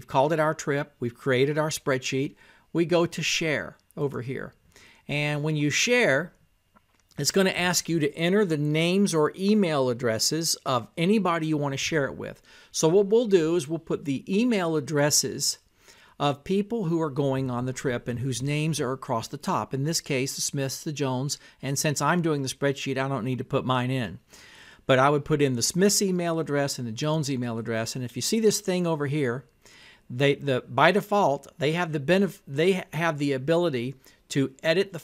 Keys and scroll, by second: 0.0-11.1 typing, 12.7 m, 13.5 i, 14.4 k, 15.1 e, 16.9 o, 17.8 u, 18.7 r, 19.4 space, 21.1 t, 22.0 r, 22.8 i, 23.7 p.